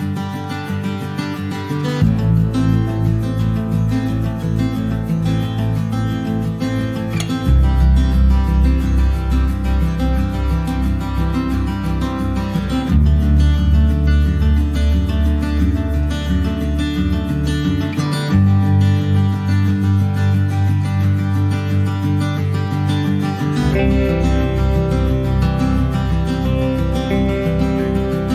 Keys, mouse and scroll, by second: 0.3-5.3 drag, 8.9-10.5 drag, 14.5 click, 15.8 click, 19.6-24.0 drag.